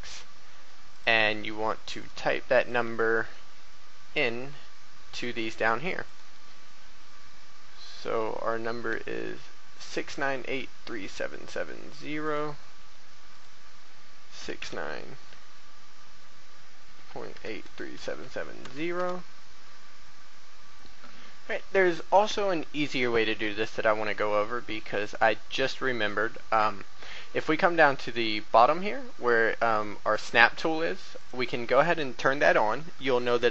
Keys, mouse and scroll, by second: 0.9 click, 2.0 right click, 2.6 click, 6.0 right click, 13.3 click, 14.4 KP_6, 14.6 KP_9, 17.0-18.6 typing, 20.7 click.